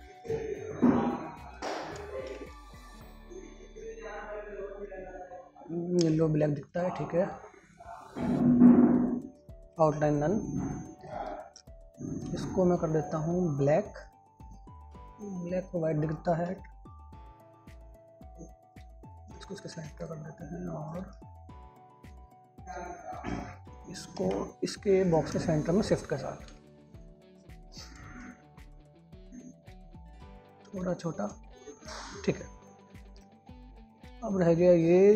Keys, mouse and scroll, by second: 2.6 shift+Page_Up.